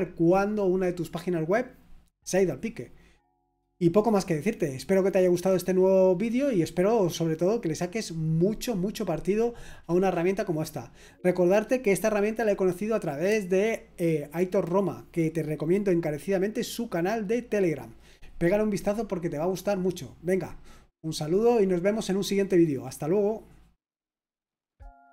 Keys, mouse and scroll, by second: 25.0 click.